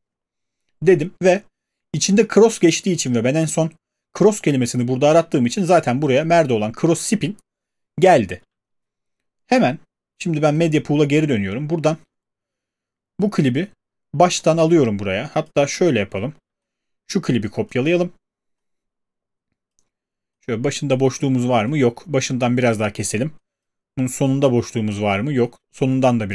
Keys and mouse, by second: 2.4 click, 2.6 click, 9.1 alt+click, 10.6 click, 13.3 click, 13.4 click, 15.4 click, 15.6 ctrl+z, 17.7 alt+click, 19.7 click, 21.0 click, 22.2 click, 23.0 click, 23.6 click, 25.1 click.